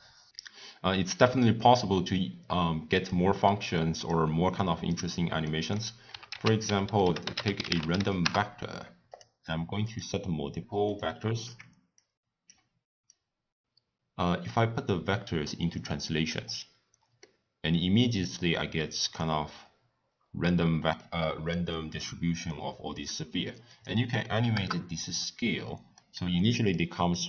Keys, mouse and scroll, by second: 2.9-5.4 drag, 5.4 middle click, 6.2 ctrl+a, 10.2 drag, 10.8 click, 11.7 x, 11.9 click, 13.0-16.1 drag, 17.2-19.1 middle drag, 19.1 scroll up 1, 19.2-19.6 scroll down 1, 19.6-20.1 scroll up 2, 20.1-20.5 scroll down 7, 20.5 scroll up 1, 20.6-21.0 scroll down 1, 21.0-23.7 middle drag, 23.7-25.9 drag, 25.9-27.0 middle drag, 27.0 scroll down 1, 27.1-27.2 scroll up 3.